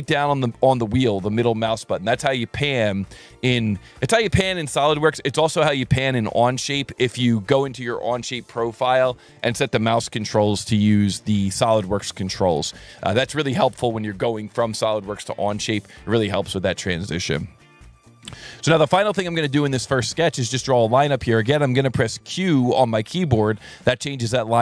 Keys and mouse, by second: 17.8 click, 18.3 s, 19.6 click, 20.2 click, 22.2 q.